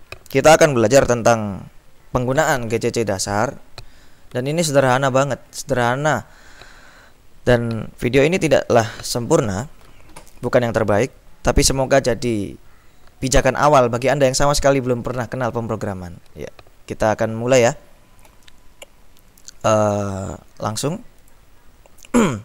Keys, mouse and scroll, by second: 18.7 click, 19.4-20.4 drag, 21.5 click.